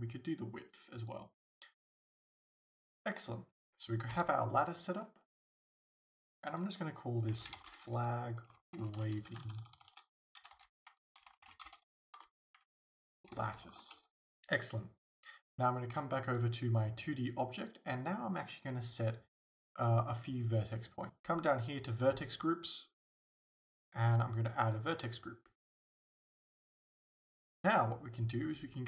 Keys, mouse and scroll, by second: 1.9-6.4 middle drag, 4.2 KP_0, 5.1-5.8 scroll up 2, 5.8-6.4 scroll up 1, 6.4-16.3 drag, 9.5 BackSpace, 13.7 t, 14.1 Return, 16.3-20.4 right drag, 21.1 click, 22.7 click, 24.7 click.